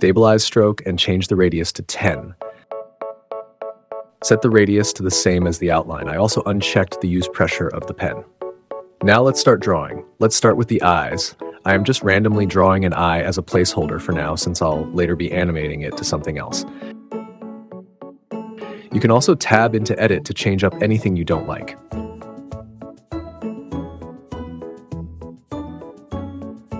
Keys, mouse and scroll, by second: 0.2 click, 0.8 click, 1.7-2.9 drag, 4.3 click, 5.4 click, 6.6 click, 7.0 click, 10.0 click, 12.6 Return, 16.4 Return, 19.9 Tab, 21.0-22.4 typing, 22.2 click, 22.8 Tab, 23.4 Tab, 24.0 s, 24.1 x, 24.3 click, 24.4 Tab, 25.7 click.